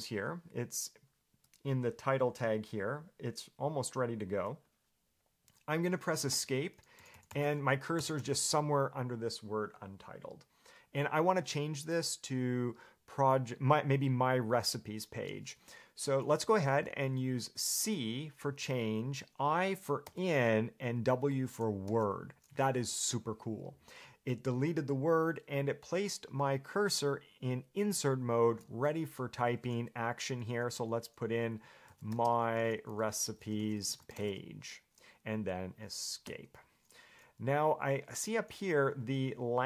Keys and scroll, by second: 6.5 Escape, 7.2-8.9 typing, 31.8-34.9 typing, 36.4 Escape.